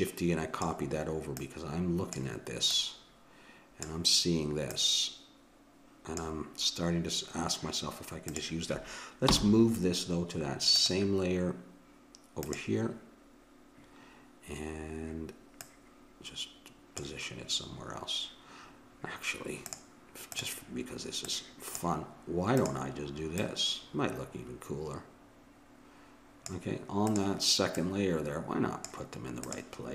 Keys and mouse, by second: 1.3-4.3 drag, 4.7-6.6 drag, 8.3-10.0 drag, 9.2 m, 12.4-14.2 drag, 15.6-17.5 drag, 19.7-25.1 drag, 27.1-29.4 drag.